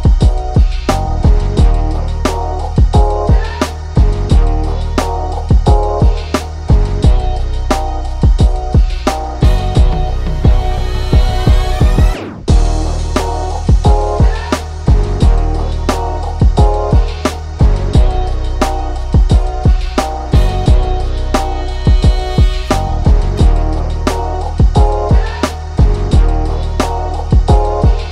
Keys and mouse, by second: 0.8 click, 3.3 ctrl+z, 4.1-7.9 drag, 7.9-9.7 drag, 9.7 ctrl+z, 9.9-13.4 ctrl+drag, 13.4 ctrl+click, 16.8-19.4 ctrl+drag, 19.4 ctrl+click, 20.1 ctrl+z, 20.4-22.2 drag, 22.2 Left, 22.8 Down, 23.0 Right, 23.3 Down, 24.4 click, 25.8 click, 28.0 click.